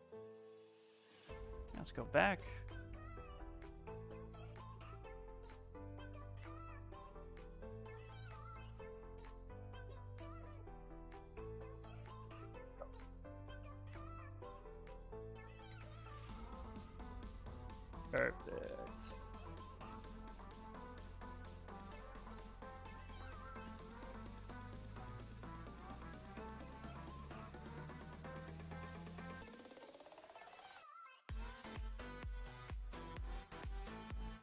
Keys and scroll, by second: 0.7 b, 1.6 l, 2.4 s, 9.9 s, 17.9 s, 20.2 s, 22.4 space, 23.5 s, 26.6 s.